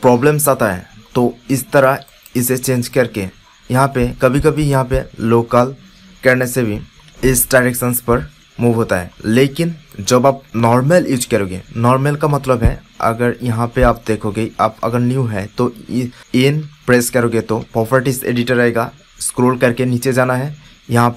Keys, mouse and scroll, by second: 1.4-4.4 middle drag, 4.4-6.1 drag, 10.5-11.9 drag, 11.9-15.9 middle drag, 16.2 n, 16.5 n, 17.5 n.